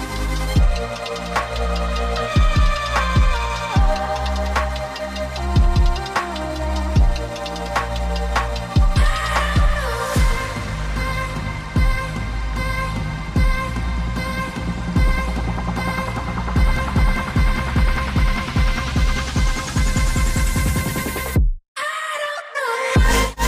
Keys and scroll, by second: 6.3 Down, 6.3 Escape, 21.9 Return, 21.9 Escape.